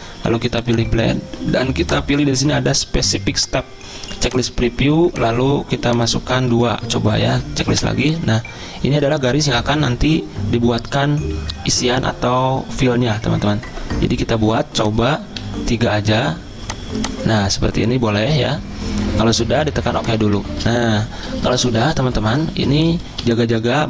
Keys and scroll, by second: 6.5 2, 15.4 3, 22.0 Escape, 22.5 z.